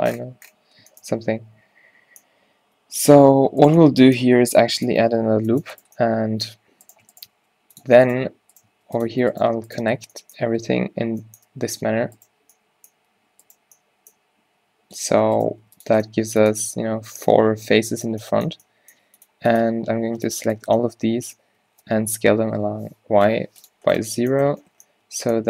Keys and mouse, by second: 2.3 middle click, 3.8-5.8 drag, 4.4 g, 5.1 ctrl+r, 7.4 g, 8.8 click, 8.8 g, 10.1 f, 10.5 f, 10.6 f, 11.5 f, 14.4 g, 15.6 click, 15.6 g, 19.7 z, 20.0 a, 20.3 b, 22.3 s.